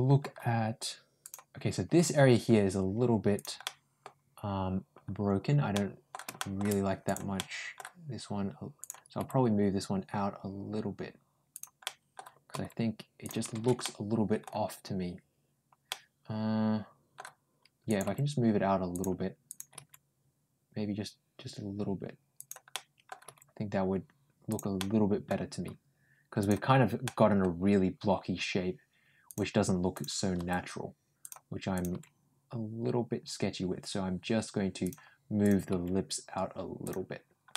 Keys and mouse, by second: 1.1 click, 1.8 g, 3.5 middle click, 5.6 middle click, 6.2 shift+middle click, 7.2 middle click, 8.7 click, 9.0 g, 11.7 middle click, 12.4 g, 13.7 middle click, 15.8-17.0 middle drag, 17.9 g, 19.3 click, 19.6 g, 22.6 middle click, 23.1 g, 24.6 middle click, 26.3 click, 26.9 middle click, 30.2 g, 31.6 click, 31.8 g, 35.3 click, 35.5 g, 37.4 middle click.